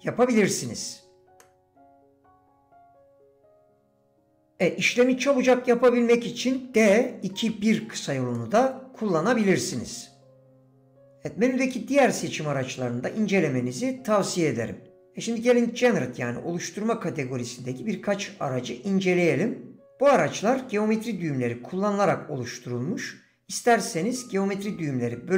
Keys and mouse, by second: 0.3 s, 1.4-4.4 drag, 8.4 click, 9.7-11.0 drag.